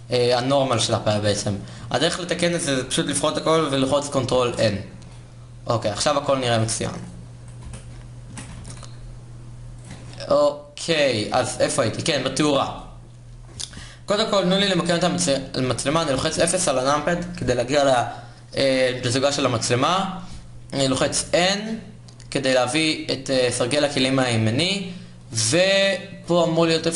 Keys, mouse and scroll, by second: 1.5 a, 3.9 ctrl+n, 4.6 Tab, 6.1 a, 7.3 l, 7.9 s, 9.6 Tab, 11.3 a, 15.6 KP_0, 20.6 n, 24.2-26.9 middle drag.